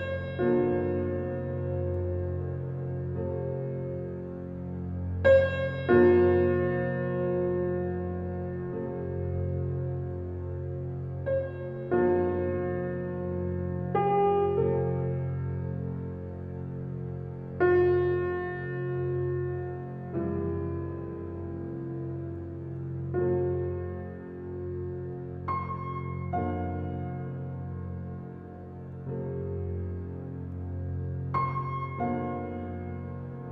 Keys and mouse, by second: 0.7-2.0 drag, 2.1-3.1 typing, 4.4-4.9 alt+drag, 5.3-6.9 alt+drag, 6.7-8.2 typing, 9.7-10.3 alt+drag, 10.4 alt+click, 11.2-11.9 typing, 11.8-14.9 alt+drag, 14.3-14.8 typing, 14.9-16.7 ctrl+alt+middle drag, 16.7-18.4 alt+drag, 17.2 middle click, 17.8 alt+middle click, 19.9-21.2 alt+drag, 21.6-24.2 alt+drag, 21.6 typing, 23.7 typing, 25.0-25.7 typing, 26.9-27.6 drag, 27.4 alt+a, 27.6-28.9 alt+middle drag, 28.9 alt+drag, 28.9 typing, 29.5-29.9 alt+drag, 30.2 alt+click, 31.2 s, 32.0 click, 32.9 alt+a, 33.3-33.5 alt+drag.